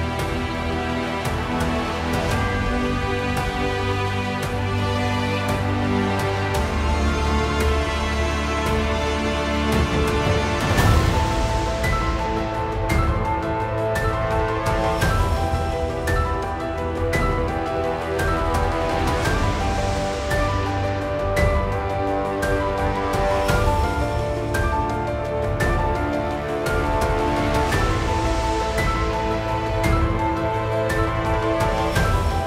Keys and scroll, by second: 26.4 Delete.